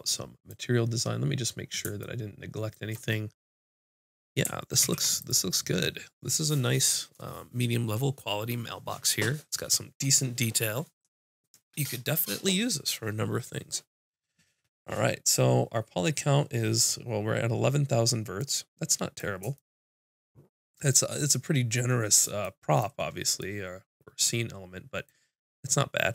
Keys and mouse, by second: 4.8 ctrl+s, 18.4-23.0 middle drag.